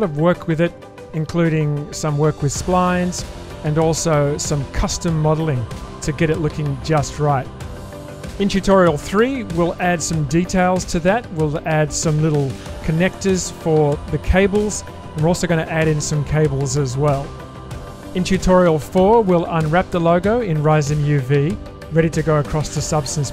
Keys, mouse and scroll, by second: 0.4 shift+space, 0.6-1.7 middle drag, 2.9 alt+shift+click, 3.8-5.6 drag, 6.2 ctrl+b, 10.9 s, 13.6-16.4 middle drag, 17.0 shift+middle click, 18.2 middle click.